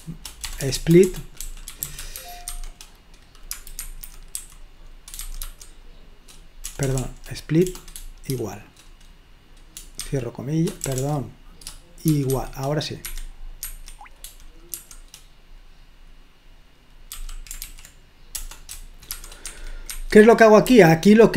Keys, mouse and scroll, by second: 0.5-5.4 typing, 6.7-8.3 typing, 11.0 BackSpace, 12.1 typing, 13.1 Escape, 13.6 Escape, 15.1 shift+0, 17.1-19.1 typing, 19.5 Escape, 19.9 Escape, 20.8 typing.